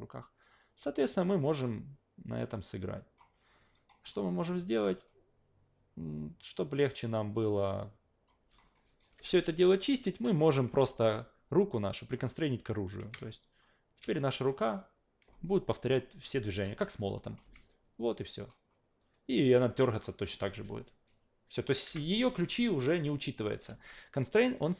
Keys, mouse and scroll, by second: 3.5 alt+right click, 3.9 alt+middle click, 5.1-8.3 drag, 8.6 alt+middle click, 8.9 alt+right click, 10.9 alt+middle click, 12.0 click, 13.5 shift+click, 14.7 click, 15.2 click, 15.9 click, 16.2 scroll down 2, 16.9 alt+right click, 17.2 alt+middle click, 17.4 alt+v, 18.0 alt+right click, 18.4 alt+middle click, 20.0 alt+middle click, 21.8 alt+v, 23.0 click, 23.7 alt+v.